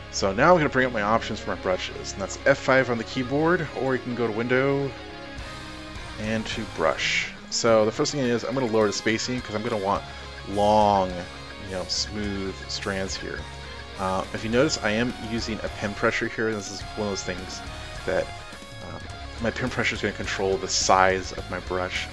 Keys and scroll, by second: 2.4 F5.